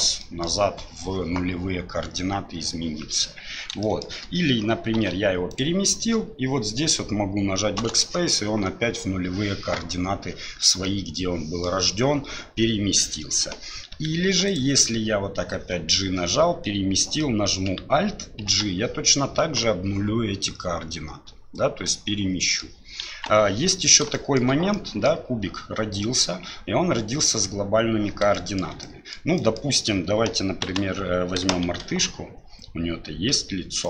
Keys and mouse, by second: 0.2 middle drag, 3.8 shift+middle drag, 5.0 g, 7.8 BackSpace, 10.8 middle click, 13.9 g, 18.5 alt+g, 21.9-22.6 middle drag, 23.1 KP_1, 24.1 shift+middle drag, 24.7-25.1 middle drag, 28.3-28.6 shift+middle drag, 28.8-29.2 middle drag, 29.4 middle click, 30.7 Delete, 31.7 shift+a.